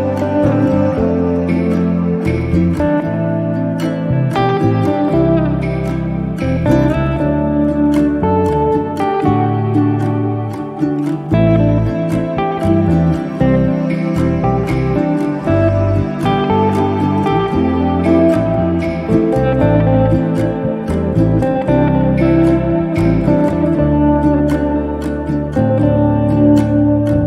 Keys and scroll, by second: 1.3 r, 4.0 space, 7.3 p, 8.7 e, 11.5 space, 16.0 r, 19.3 space, 24.3 f, 26.3 5.